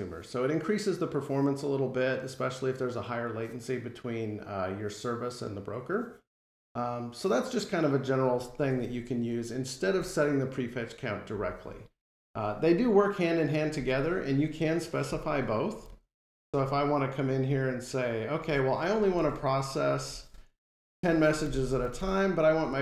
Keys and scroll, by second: 19.0 alt+Return.